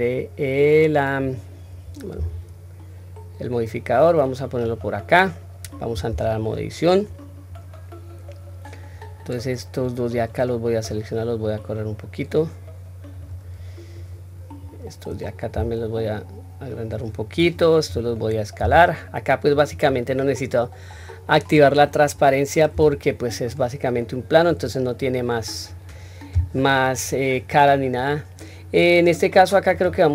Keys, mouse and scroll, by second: 0.7 scroll up 1, 1.0-1.9 scroll down 1, 1.9 s, 4.9-5.8 scroll down 1, 5.8 Tab, 6.4-7.2 scroll up 1, 7.2 scroll down 1, 8.0-8.6 scroll down 1, 8.6-9.8 drag, 10.6-12.9 drag, 13.7 click, 15.3 s, 17.1 click, 18.3 s, 20.1-20.6 scroll down 1, 20.6-21.4 scroll up 1, 22.5 Tab, 22.5-23.1 scroll up 1, 23.2-24.3 right drag, 29.5 click.